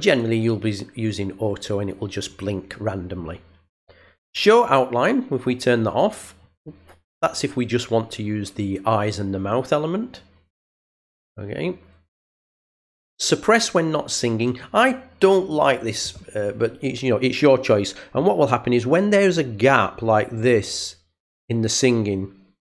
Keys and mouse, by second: 0.0 click, 5.5 click, 12.1 click.